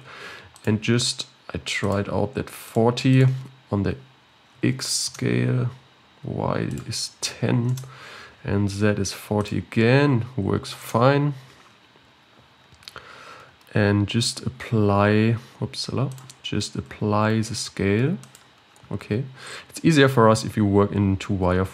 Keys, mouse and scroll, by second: 0.5-2.7 drag, 3.1-12.3 drag, 12.3-15.0 scroll down 16, 15.3 ctrl+s, 16.8 ctrl+a, 19.8-20.3 scroll up 2, 20.3 z.